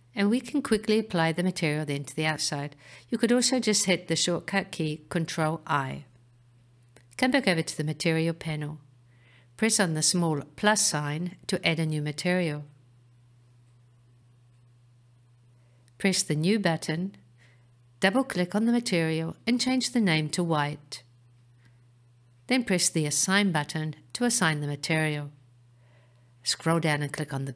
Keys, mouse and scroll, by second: 4.7-5.2 scroll up 4, 6.0-6.9 scroll up 4, 7.1-10.1 scroll up 1, 11.0 click, 16.6 click, 17.9 click, 18.5 click, 24.8 click, 26.7-27.2 scroll down 1, 27.2-27.5 scroll down 4.